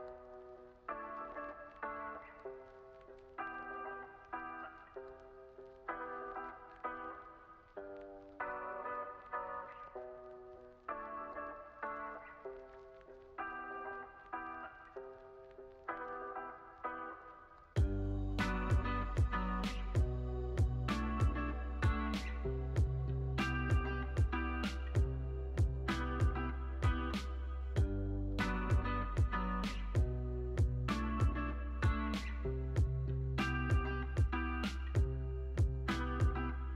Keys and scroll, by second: 25.2 u, 34.4 super+s.